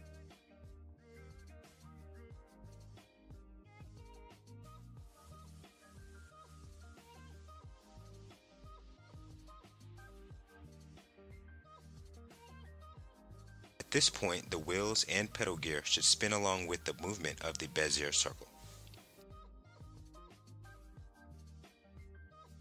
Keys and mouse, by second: 3.1 click, 4.0 click, 4.9 click, 8.0 click, 9.9 ctrl+Tab, 12.9 click, 14.0-22.1 drag, 22.1 middle click, 22.2 click.